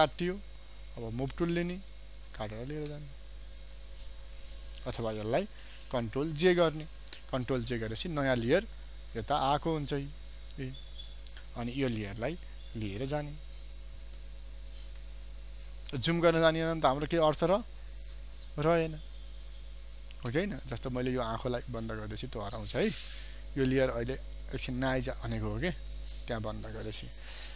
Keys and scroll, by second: 5.6 ctrl+z, 6.6 ctrl+j.